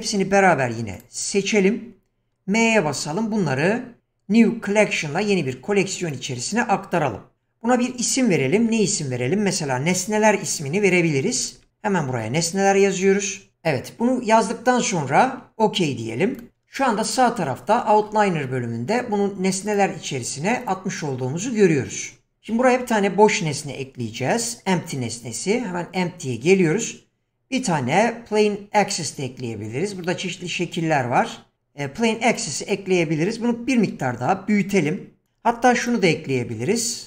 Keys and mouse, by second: 0.5 q, 2.8 m, 23.5 shift+a, 33.9 s, 35.7 x, 36.3 shift+a.